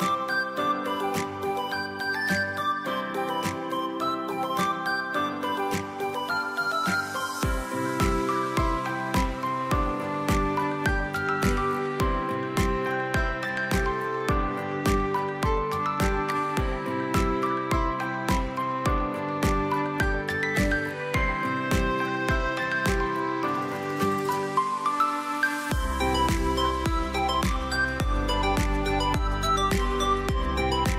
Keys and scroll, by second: 9.9 v, 17.8 space, 20.8 s, 23.8 v, 25.7 space, 29.0 space.